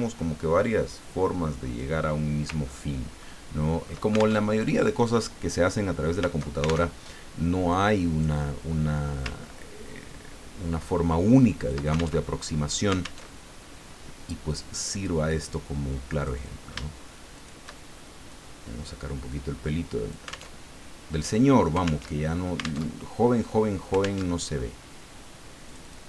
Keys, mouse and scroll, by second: 2.7-3.0 ctrl+scroll down 2, 3.2 ctrl+click, 4.4 ctrl+alt+Tab, 6.8 alt+Tab, 7.7 click, 9.2-11.9 ctrl+drag, 12.3 ctrl+alt+Tab, 13.2 alt+Tab, 14.6 click, 16.2 click, 17.3 shift+click, 18.3-20.5 drag, 20.5 alt+Tab, 22.0 alt+Tab, 22.8 alt+Tab, 24.2 alt+Tab, 25.7 click.